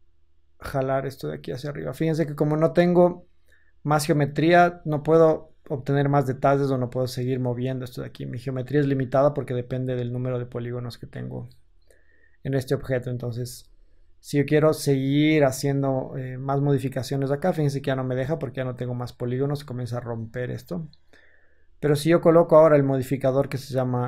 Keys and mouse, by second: 10.5 Tab, 13.3 Tab.